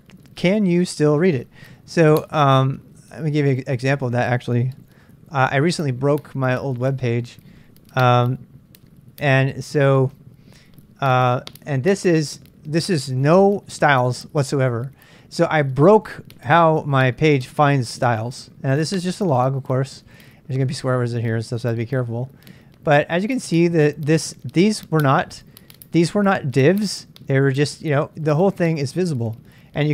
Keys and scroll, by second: 4.6-5.9 typing, 9.3 Return.